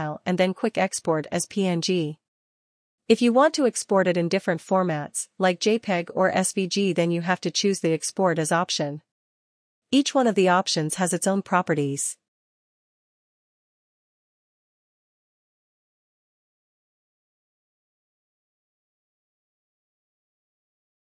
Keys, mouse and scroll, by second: 8.4 click, 14.4 click, 17.0 click, 18.3 click, 20.5 click.